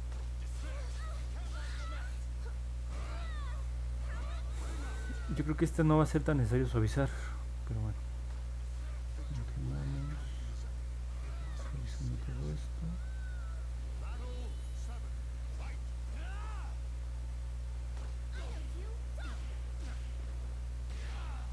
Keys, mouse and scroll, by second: 1.2 click, 1.5 click, 1.8 click, 2.1 click, 2.4 click, 2.7 click, 8.6 click, 10.7 click, 11.9 click, 12.7 click, 13.5 click, 14.7 click, 15.4 click, 16.5 click, 17.1 click, 18.4 click, 19.3 click, 19.9 click, 20.3 click, 20.6 click, 21.3 click.